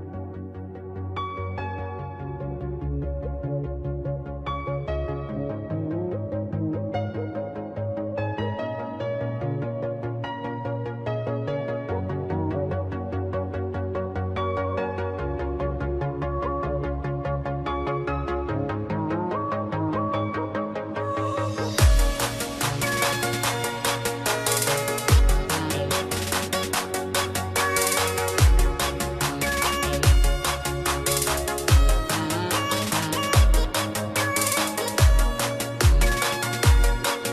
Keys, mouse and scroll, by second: 0.4 click, 0.9 right click, 1.3 click, 2.4 right click, 2.9 click, 3.9-4.5 scroll, 4.5 click, 4.8 right click, 5.9 click, 7.0 right click, 7.5 click, 9.7 ctrl+x, 10.0 click, 11.2 ctrl+f, 12.1 click, 13.5 click, 17.4 click, 18.3 shift+click, 19.0 click, 20.7-23.2 scroll, 23.3 click, 26.3 ctrl+d, 26.4 typing, 27.4 click, 29.5 ctrl+z, 29.7 click, 30.0 ctrl+z, 30.2 click, 31.6 click, 34.8 click, 35.5 click, 37.1 click.